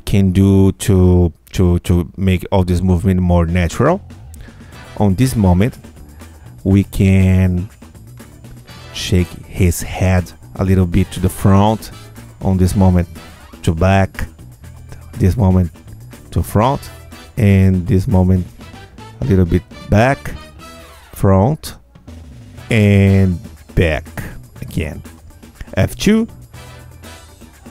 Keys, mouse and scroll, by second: 2.3-6.4 drag, 6.5 Tab, 7.7 click, 9.1 click, 10.1 q, 10.7 click, 12.3 click, 12.9 q, 13.9 click, 15.7 click, 16.2 q, 16.8 click, 18.0 click, 18.5 q, 19.3 click, 20.9 click, 21.4 q, 22.4 click, 23.9 click, 24.4 q, 25.2 click, 26.6 F2.